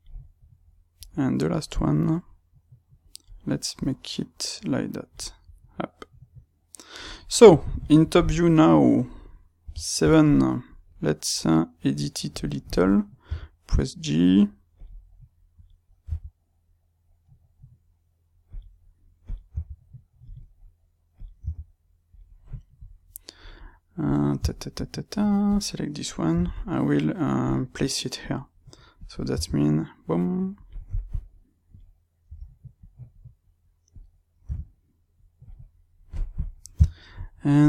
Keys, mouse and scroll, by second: 0.9 click, 3.7 click, 5.4 click, 7.1-12.3 middle drag, 9.5 KP_7, 12.3-13.3 drag, 13.3 g, 14.8 click, 15.5 click, 16.1 g, 18.5 click, 19.2 click, 19.5 g, 20.3 click, 21.1 click, 21.3 g, 22.1 click, 24.4-25.4 shift+middle drag, 25.4 click, 26.3 g, 27.5 click, 28.9 click, 29.3 r, 30.6 click, 31.6 click, 32.3 r, 33.9 click, 34.5 g, 35.5 click, 36.7 shift+middle click, 37.5 click.